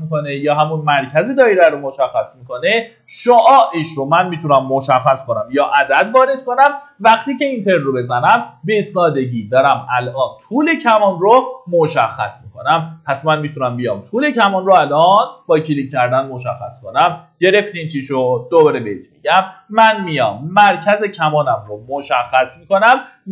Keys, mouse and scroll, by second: 1.0 scroll up 1, 5.2 KP_4, 15.0 click.